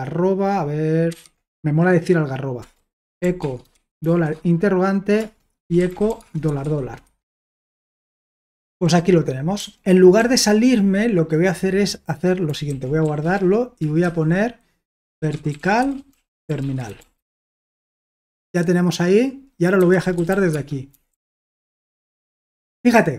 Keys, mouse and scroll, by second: 1.1 typing, 2.5-9.5 typing, 5.2 Return, 7.0 Escape, 12.8-17.9 typing, 19.5-21.4 typing, 22.0 Return.